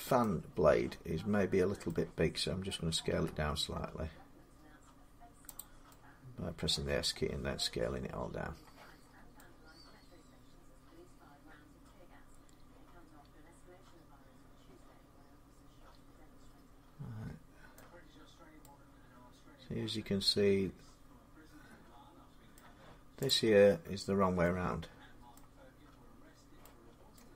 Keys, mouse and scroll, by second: 1.6 middle click, 2.9 s, 4.0 scroll up 4, 5.4 click, 6.5 scroll, 6.8-7.9 scroll down 6, 8.8 scroll down 1, 8.9 scroll up 5, 9.2-10.6 middle click, 9.2 scroll, 10.6 scroll up 6, 17.5 middle click, 17.9 scroll down 2, 18.4 middle click, 18.8-20.5 middle drag, 22.3 middle click, 22.4 scroll, 23.0 click, 23.8 scroll down 2, 24.3 middle click, 25.1 middle click, 26.9 middle click.